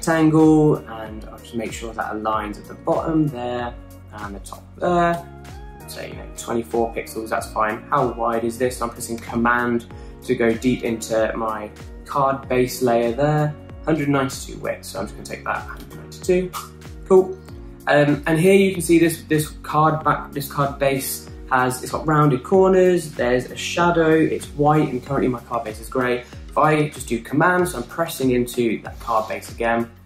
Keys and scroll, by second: 7.0 Left, 16.3-17.3 typing, 17.4 Return.